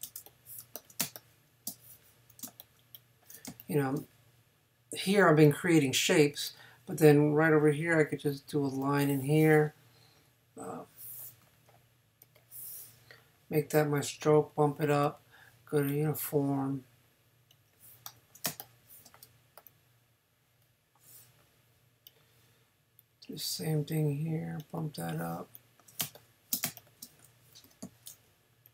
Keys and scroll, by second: 1.0 super+space, 2.4 space, 11.4 x, 18.5 super+space, 19.4 space, 26.0 super+space, 27.8 n.